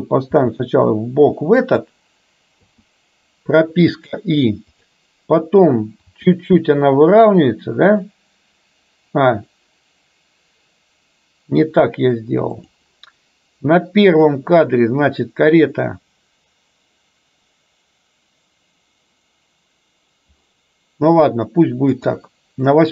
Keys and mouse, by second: 0.4 r, 2.7 i, 4.9 click, 6.2 r, 14.2 click, 22.0 click.